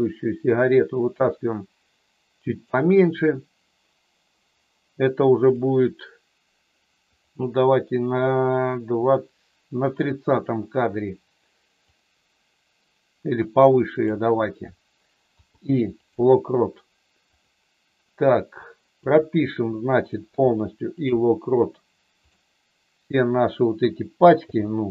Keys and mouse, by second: 1.2-2.6 drag, 5.4 click, 7.2 click, 9.9 click, 11.9-14.1 drag, 15.4 i, 17.3 click, 19.0 click, 22.1 click, 24.4 i.